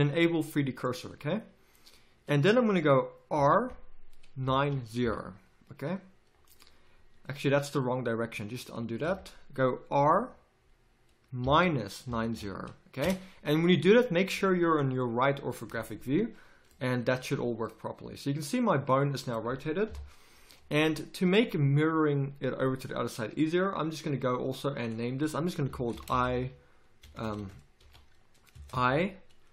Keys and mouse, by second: 3.3 r, 8.7 ctrl+z, 9.9 r, 17.1 z, 19.9 KP_3, 20.8 z, 24.8-27.2 drag, 27.2 BackSpace.